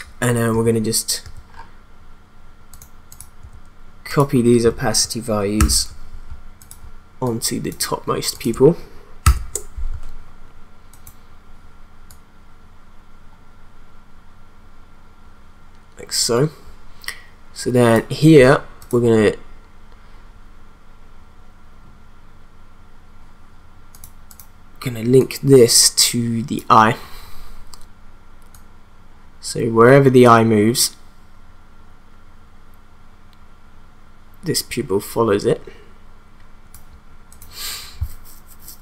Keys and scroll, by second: 0.6 t, 3.5 t, 5.5 ctrl+c, 9.2 ctrl+v.